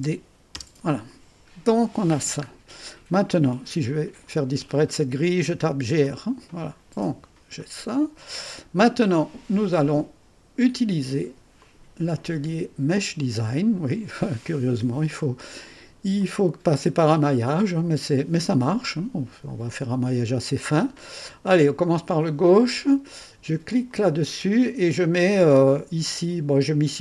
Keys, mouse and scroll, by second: 0.5 Return, 1.4-2.0 scroll down 1, 2.0 scroll up 1, 2.2-2.8 scroll down 1, 5.6-6.5 typing, 7.0 click, 7.5-9.8 drag, 9.8-11.6 middle drag, 11.6 click, 12.9 click, 13.5 middle click, 14.6-15.1 scroll up 1, 15.1 middle click, 16.2-18.3 drag, 22.2 click, 23.8 click.